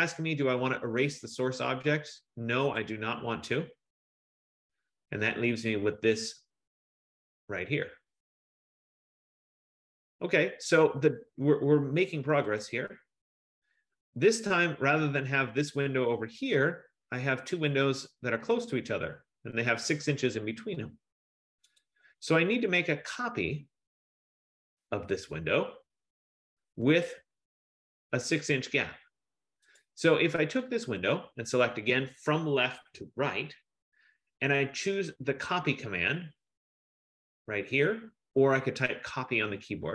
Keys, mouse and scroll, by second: 3.0 click, 13.0 click, 21.9 click, 23.6-26.0 scroll, 26.0-26.9 scroll, 29.9 click, 31.2 click, 31.7 F15.